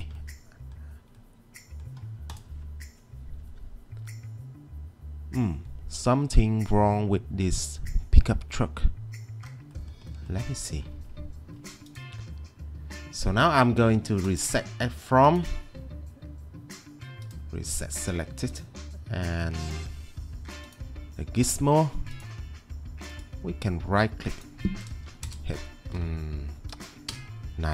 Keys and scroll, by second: 24.8-25.7 typing, 27.1 Return.